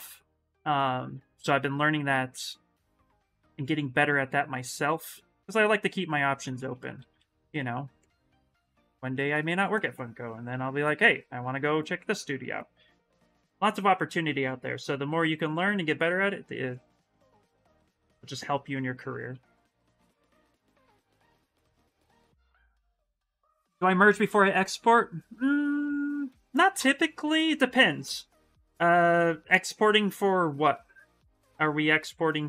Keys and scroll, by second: 3.3 s, 6.2 ctrl+z, 6.3 ctrl+z, 6.7 ctrl+z, 6.9 ctrl+z, 7.1 ctrl+z, 7.3 ctrl+z, 17.6 s, 29.8 s.